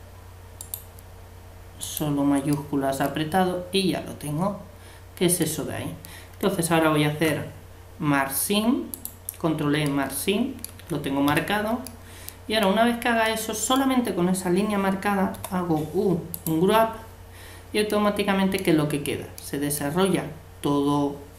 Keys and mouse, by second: 0.6-3.6 right drag, 2.5-4.3 middle drag, 7.1 ctrl+e, 9.9 middle click, 10.7 a, 11.3 a, 15.3 u.